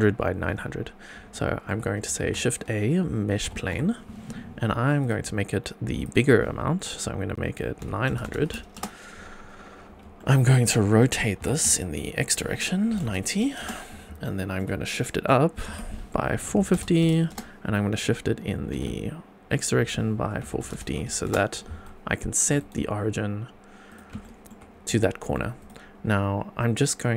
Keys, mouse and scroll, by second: 1.3-1.6 shift+middle drag, 2.2 shift+a, 5.1 shift+a, 5.6 click, 6.0-8.8 drag, 8.2 KP_0, 9.5-10.0 scroll up 4, 10.1-10.6 shift+middle drag, 10.7-11.1 middle drag, 11.4 r, 11.6 x, 12.9 KP_9, 13.0 KP_0, 13.6 Return, 14.2-14.6 shift+middle drag, 14.9-15.3 middle drag, 15.5-16.7 typing, 17.3 Return, 18.5 g, 18.7 x, 20.4 KP_4, 20.5 KP_5, 20.7 KP_0, 21.2 Return, 21.8-22.9 shift+right drag, 23.8 right click, 24.2 shift+middle drag, 24.6 scroll up 2, 25.0-25.3 shift+middle drag, 25.5 click, 26.7-27.1 scroll down 2.